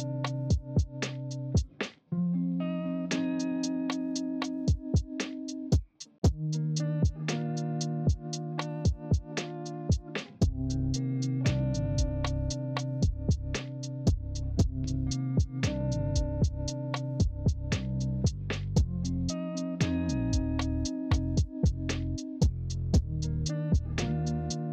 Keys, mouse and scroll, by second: 2.5 ctrl+z, 8.3 ctrl+z, 14.4 ctrl+z, 20.7 ctrl+z.